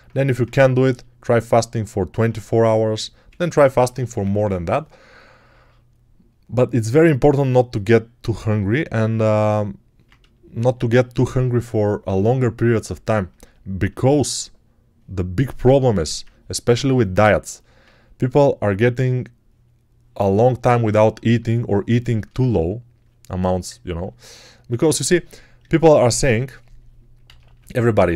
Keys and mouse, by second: 0.1 1, 3.7-4.3 typing, 12.5-17.4 alt+shift+right drag, 25.6-27.1 alt+drag, 27.1 ctrl+z.